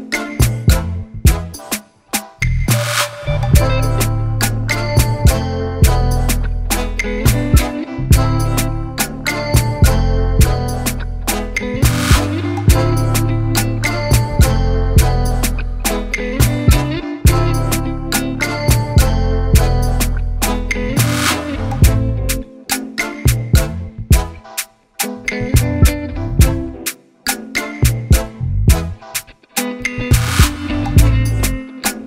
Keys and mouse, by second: 0.6 click, 1.8 click, 2.6 click, 3.0 click, 5.5 click, 6.1 click, 8.5 click, 9.1 Down, 10.4 Up, 11.6 click, 12.6 ctrl+y, 13.7 ctrl+t, 15.0 click, 16.1 Return, 18.0 click, 18.8 click, 21.6 shift+click, 22.8 right click, 28.8 click, 30.6 right click, 31.9 click.